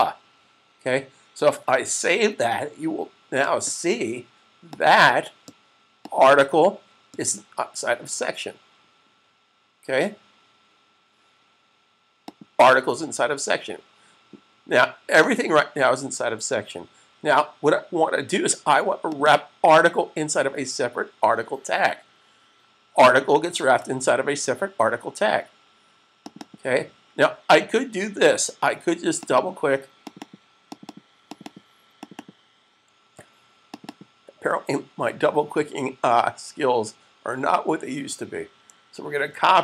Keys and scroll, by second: 1.7 s, 38.8 super+c.